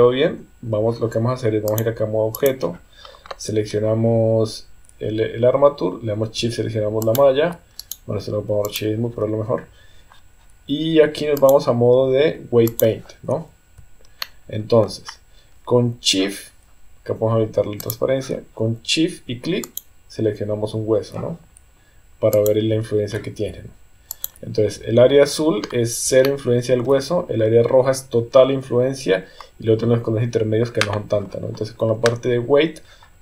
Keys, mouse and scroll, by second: 1.8 click, 7.1 shift+click, 7.8-8.8 right drag, 11.4-12.8 drag, 14.2 shift+middle click, 17.8 click, 19.7 shift+click, 22.4 shift+click, 24.1 shift+click, 26.3 shift+middle click.